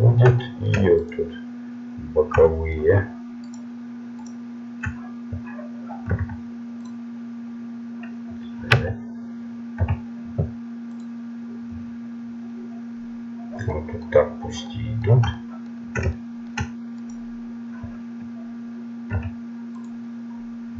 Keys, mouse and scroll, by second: 0.4 click, 1.1-2.5 right drag, 9.8 u, 13.5-16.1 middle drag, 16.2 middle click, 17.0-18.1 right drag, 19.9 u.